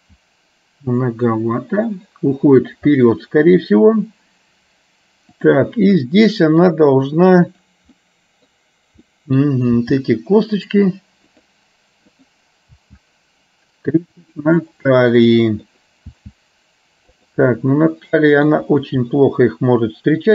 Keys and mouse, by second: 0.0 g, 3.0 middle click, 6.4 middle click, 7.5 click, 8.0 middle click, 9.3 middle click, 9.9 g, 12.3 click, 12.9 g, 14.5-15.8 middle drag, 16.4 g, 17.7 middle click, 19.3-20.3 middle drag.